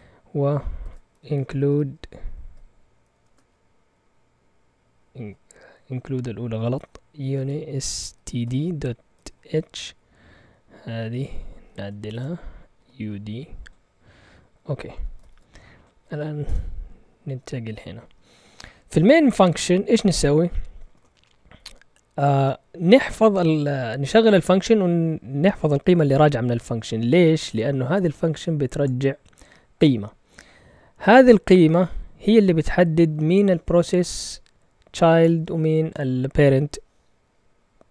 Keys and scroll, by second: 0.0-3.1 typing, 6.8-9.4 typing, 9.8 Up, 10.3 Left, 10.8-13.5 typing, 14.9-16.4 typing, 16.4 Return, 18.0 Up, 20.7 Right, 20.7 Right, 20.8 Right, 21.0 Right.